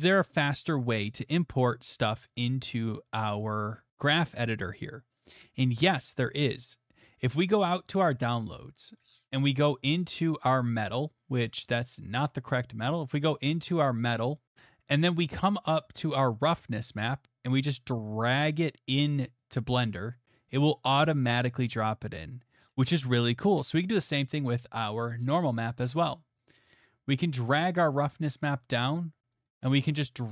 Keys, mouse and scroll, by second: 0.6 click, 1.1 middle click, 7.5 click, 10.6 click, 10.8 click, 12.4 click, 13.7 click, 13.9 click, 19.7 click, 28.2 middle click, 28.4-29.3 scroll, 29.5 click.